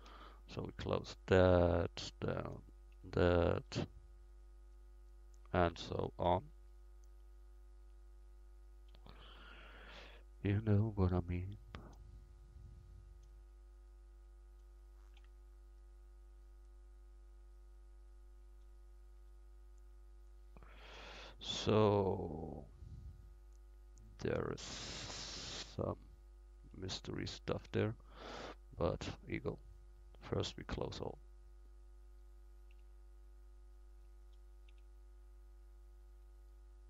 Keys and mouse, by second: 0.1 f, 3.0 f, 6.3 f, 8.9 f, 12.4-19.8 right drag, 15.2 f, 19.2 f, 20.3 middle click, 22.9-24.6 middle drag, 26.9-29.1 middle drag, 29.1-32.7 right drag, 30.5 f, 32.7 f, 34.7 f.